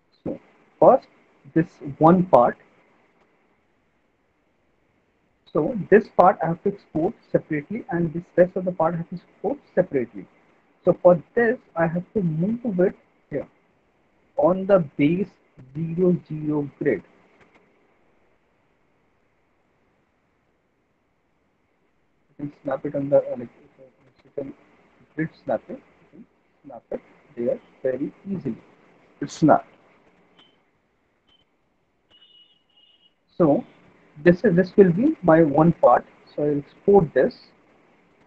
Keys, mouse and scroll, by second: 0.5 click, 4.0 alt+middle click, 4.4 middle click, 4.6 middle click, 4.9 middle click, 7.3 alt+middle click, 14.5 click, 16.8 alt+middle click, 17.8 click, 18.6 click, 21.7 click, 22.4 alt+middle click, 22.6 middle click, 22.7 middle click, 23.8 alt+middle click, 25.2 click, 27.2 click, 28.3 alt+middle click, 32.5 click, 33.2 middle click, 34.3 alt+middle click, 34.4 alt+middle click, 37.1 click.